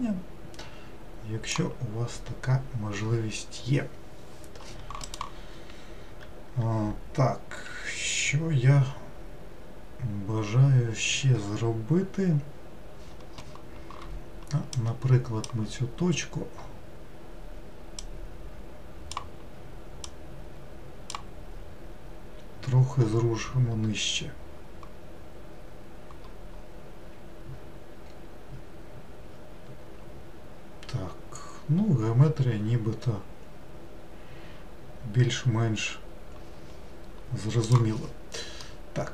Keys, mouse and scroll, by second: 14.8 click, 18.0 click, 20.1 click, 38.7-39.1 middle drag.